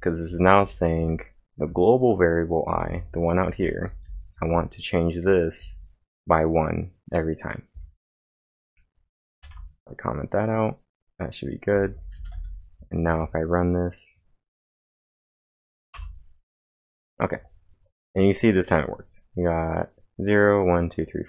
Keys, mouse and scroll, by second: 0.0-1.6 typing, 3.4-6.1 typing, 7.7 k, 9.4 ctrl+/, 11.7-12.9 typing, 13.1 ctrl+`, 15.2 Up, 15.9 Return.